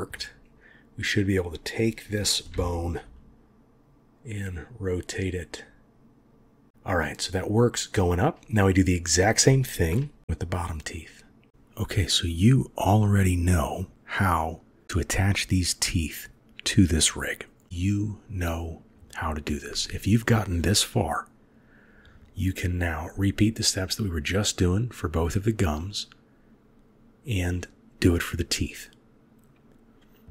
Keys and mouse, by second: 0.1-0.6 middle drag, 0.6-1.7 drag, 0.6-1.7 right drag, 2.4 r, 11.1 click, 13.2-14.1 middle drag, 15.1-15.5 drag, 15.1-15.5 right drag, 16.0 click, 16.6 click, 18.2-19.1 drag, 21.8 click, 22.1 click, 22.2 click, 22.4 click, 22.5 click, 22.7 click, 22.9 click, 23.1 click, 23.4 click, 23.8-25.1 drag, 26.8-28.4 drag, 28.9 click, 29.9-30.3 drag.